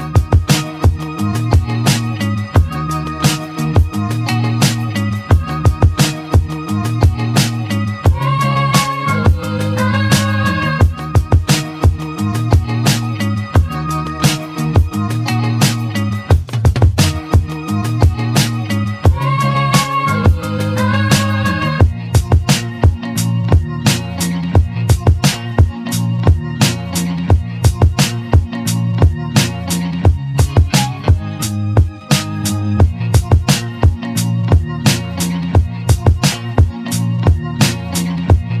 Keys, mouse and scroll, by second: 0.8 `, 2.2-2.7 scroll down 1, 2.7-4.6 scroll up 1, 11.0 shift+d, 14.5-15.8 scroll down 1, 15.8 r, 23.3-23.6 scroll down 2, 23.6-24.2 scroll up 1, 24.2 click, 25.2 shift+d, 29.3 click, 30.9-31.4 scroll down 5, 31.4-32.5 scroll up 7, 32.5-33.3 scroll up 2, 33.3 scroll down 2, 34.1 click, 37.2-38.6 middle drag.